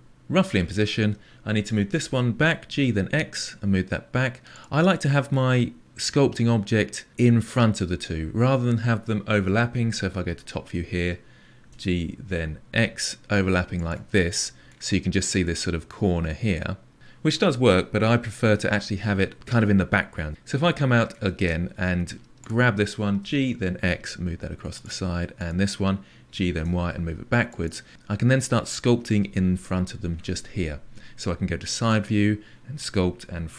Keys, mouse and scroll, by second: 1.9 g, 4.9-7.1 middle drag, 10.2 KP_7, 11.6 g, 14.1 middle click, 14.9-15.4 scroll up 5, 15.4-16.9 middle drag, 20.3-20.6 scroll down 3, 20.6-22.3 middle drag, 22.3 click, 23.1 g, 25.3 click, 26.2 g, 27.9-31.8 middle drag, 31.8 KP_3.